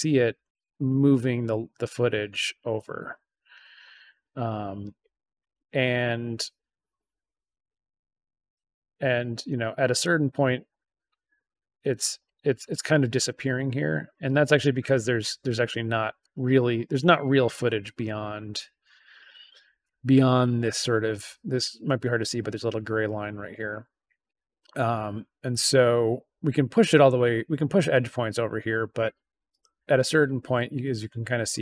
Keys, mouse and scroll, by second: 5.9-8.5 drag, 9.1 click, 11.8 click, 13.2 click, 16.1-18.0 drag, 19.4 click, 23.5-30.3 drag.